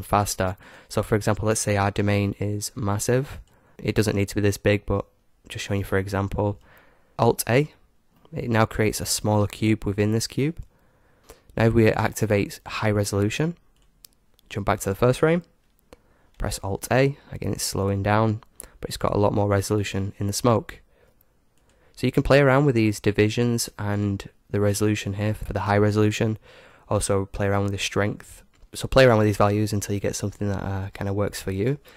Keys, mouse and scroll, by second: 0.7-3.0 right drag, 1.9 s, 3.7-5.2 drag, 6.0-7.6 drag, 7.1 alt+a, 8.4-10.3 middle drag, 11.2-15.5 drag, 16.3 alt+a, 18.8-20.8 middle drag, 21.8-26.4 drag.